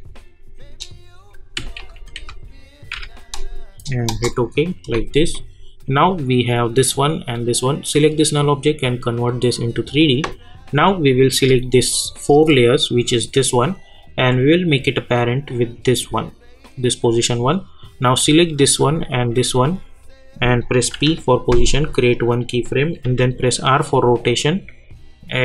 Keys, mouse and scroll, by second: 0.0-1.2 typing, 1.5 Left, 2.9 typing, 4.1 Return, 6.1 click, 8.3 click, 12.1 shift+click, 14.6-16.6 drag, 19.1 ctrl+click, 20.9 p, 22.1 click, 23.0 r.